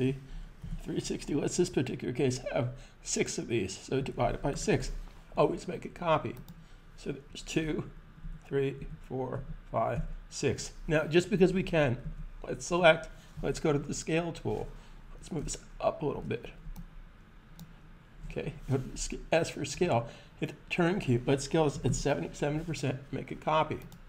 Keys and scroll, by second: 0.0-0.5 typing, 3.2-4.9 typing, 7.9 super+d, 8.6 super+d, 9.2 super+d, 9.7 super+d, 11.8 super+a, 13.2 super+s, 18.7 s, 21.5 7, 21.6 7, 23.7 typing.